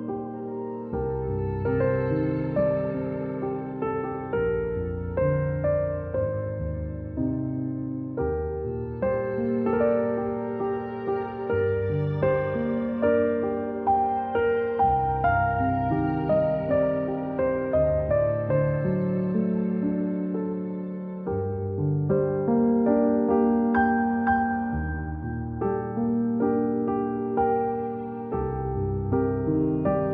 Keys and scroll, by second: 0.3-0.7 typing, 2.1 z, 3.2 a, 5.8 z, 6.5 space, 7.5 space, 7.9 v, 10.5-11.9 space, 12.7 a, 24.8-27.0 typing, 28.5 v.